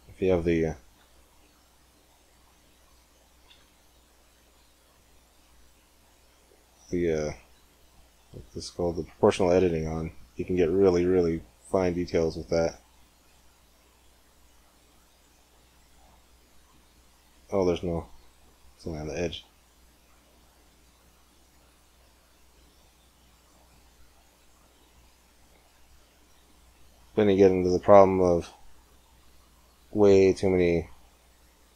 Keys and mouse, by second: 0.8 g, 4.4 middle click, 4.8 middle click, 4.9 click, 5.0-9.6 middle drag, 9.6-11.7 right drag, 11.5 middle click, 11.9 click, 12.0-13.6 right drag, 12.4-13.6 drag, 13.6 g, 13.8-14.8 right drag, 15.0 right click, 15.3 a, 16.2 middle click, 17.1 right click, 17.3 middle click, 18.4 middle click, 18.7-20.1 right drag, 19.0 g, 24.4 middle click, 25.8 g, 27.0 middle click, 27.2 middle click, 27.2 middle click, 27.6 middle click, 29.0 click, 29.2 g, 29.9 click, 30.4 middle click, 30.5 click, 30.6 middle click, 30.7 middle click.